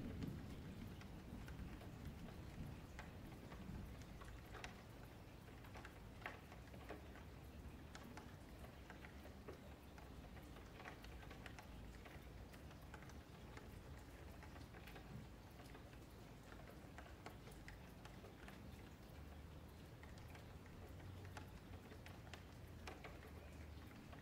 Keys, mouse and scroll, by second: 0.0 KP_Divide, 0.2-1.4 middle drag, 1.4 F3, 1.5 click, 2.2 F3, 2.3 middle click, 2.8-3.7 scroll up 3, 3.7-4.7 middle drag, 4.7 KP_Divide, 5.3-6.4 middle drag, 6.4 click, 7.7 shift+Tab, 8.1 click, 9.1-11.5 middle drag, 11.5 click, 12.8 middle click, 13.4 ctrl+z, 13.6-15.0 middle drag, 15.0 g, 19.4-20.5 middle drag, 20.5 3, 20.6 click, 21.2 q, 23.8 F3, 24.0 middle click.